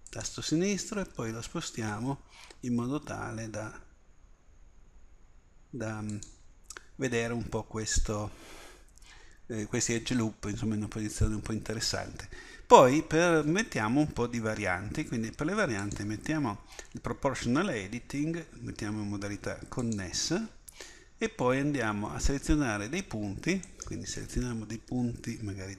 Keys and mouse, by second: 15.9-21.7 drag, 23.7-25.7 drag.